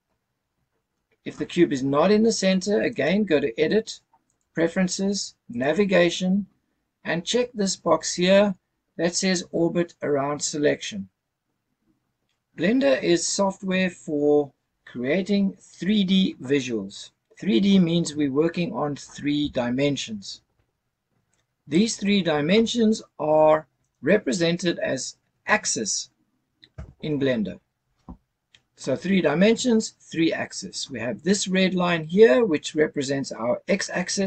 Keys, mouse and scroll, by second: 2.9-4.6 drag, 23.8 click, 26.7 KP_0, 29.5 scroll up 1, 30.1-32.3 scroll up 1.